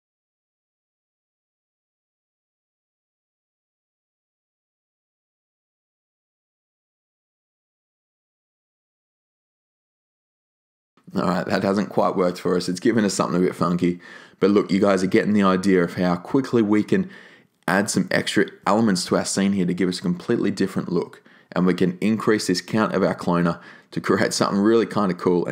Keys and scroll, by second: 2.8 2, 2.9 Return.